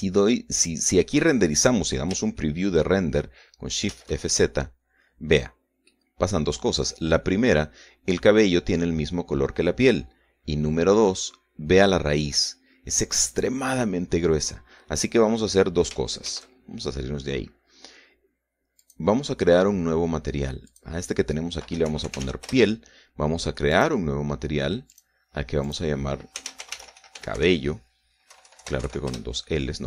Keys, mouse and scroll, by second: 2.7 scroll up 2, 3.3 shift+middle click, 4.9 shift+z, 6.9-8.1 drag, 8.3 scroll up 2, 11.1 scroll up 2, 12.5-12.8 scroll up 2, 14.9-15.5 scroll down 2, 17.2 shift+z, 19.8 click, 21.7 click, 22.6-23.7 typing, 24.7 click, 25.9 click, 26.6 click, 27.1-29.3 typing, 29.8 Delete.